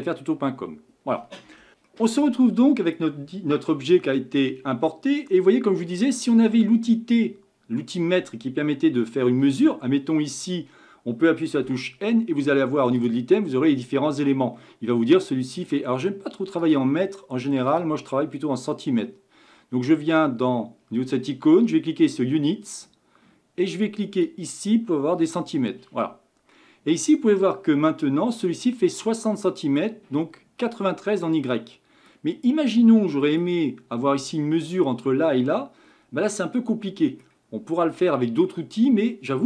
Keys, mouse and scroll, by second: 2.0-3.1 middle drag, 3.1-3.8 scroll up 1, 3.8-27.6 shift+middle drag, 27.6-28.7 scroll up 1, 28.7-29.4 scroll up 1, 29.4-33.5 middle drag, 33.5-35.8 scroll up 1, 35.8-36.3 scroll down 2, 36.3-39.4 middle drag.